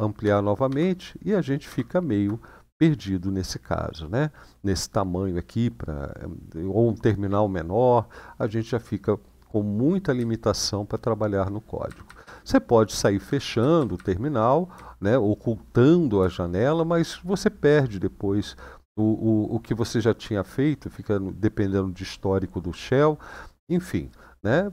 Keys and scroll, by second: 0.0 ctrl++, 1.4 ctrl++, 10.0-11.1 Down, 11.6 Up, 11.8 Up, 11.9-12.9 Up, 13.3 Up, 13.7 Up, 14.5-15.6 Down, 15.9 Down.